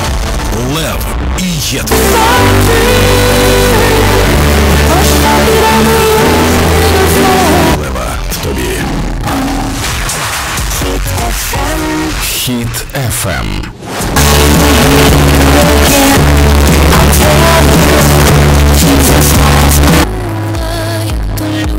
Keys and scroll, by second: 8.1 Page_Down, 20.0 Page_Down.